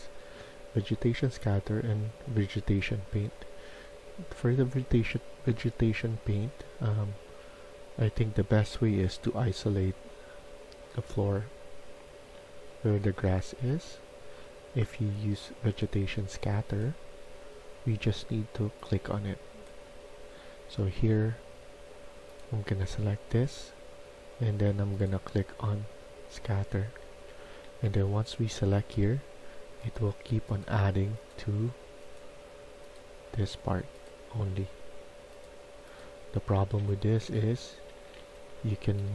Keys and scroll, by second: 7.1 typing, 26.5-27.5 typing, 35.8-39.1 typing.